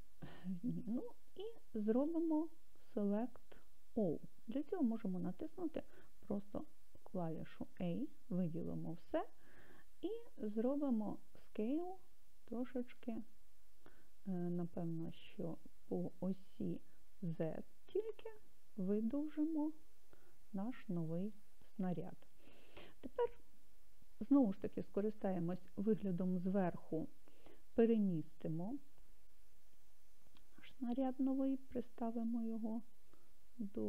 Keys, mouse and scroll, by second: 3.1-5.0 drag, 7.0 a, 10.8 s, 15.9 click, 17.2 s, 18.4 z, 21.4 click, 25.2 KP_7, 28.9 g.